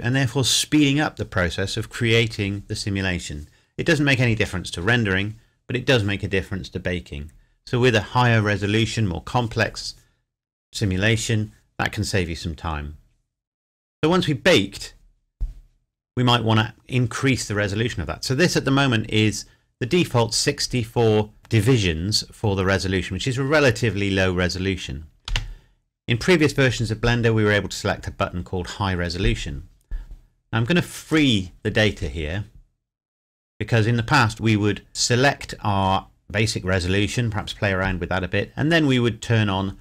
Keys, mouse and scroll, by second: 25.3 space, 29.1-29.8 scroll down 1, 31.1 click, 34.9-36.2 scroll up 1, 36.7-37.2 scroll down 1.